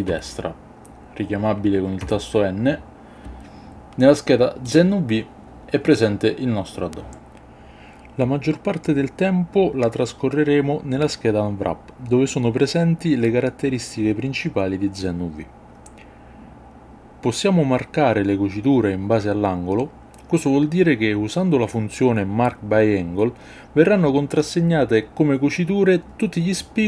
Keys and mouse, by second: 0.1 n, 2.4 n, 4.6 click, 17.3-19.6 drag, 22.1-24.5 middle drag, 24.8 ctrl+middle click, 25.7-26.8 middle drag.